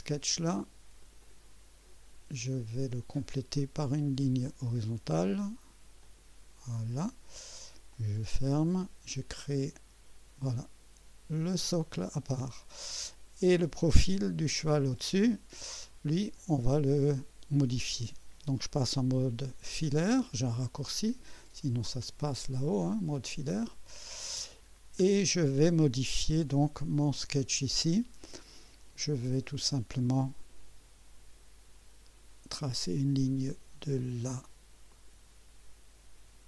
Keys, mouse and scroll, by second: 1.0 click, 3.1 click, 4.4 click, 6.0 click, 6.7 right click, 7.9 click, 9.6 click, 11.4 click, 14.4 click, 15.6 scroll up 1, 16.4-17.7 right drag, 22.8 click, 23.9 right click, 24.7-25.0 scroll down 2, 28.8 scroll up 2, 32.5 click, 34.9 click.